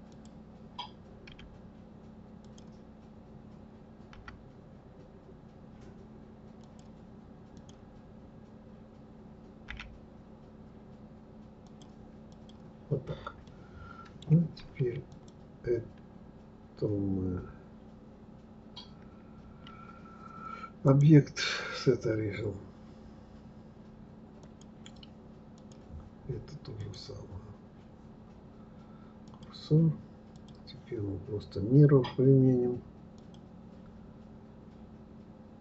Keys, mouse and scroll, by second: 7.5 click, 9.7 g, 12.3 click, 13.4-15.1 middle drag, 15.1 click, 20.8-23.8 drag, 25.5 click, 26.8-29.8 drag, 30.3 click, 33.1-35.6 drag.